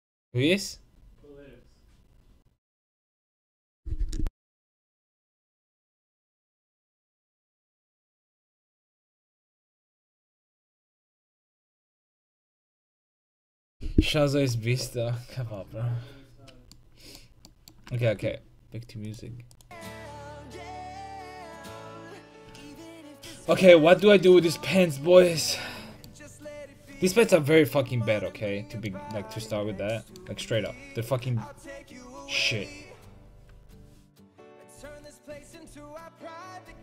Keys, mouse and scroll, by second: 16.6-17.6 middle drag, 30.3 Tab, 35.3-36.3 middle drag, 36.3 right click.